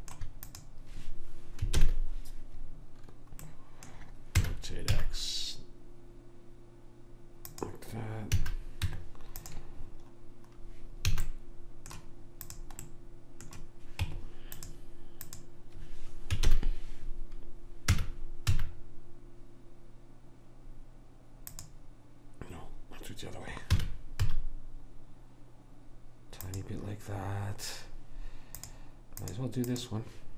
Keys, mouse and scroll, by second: 1.9 ctrl+l, 2.1 click, 4.6 r, 8.4 a, 8.9 Tab, 11.2 a, 12.6 click, 14.1 Tab, 15.4 click, 16.6 ctrl+l, 18.0 r, 23.8 r, 28.7-30.3 drag.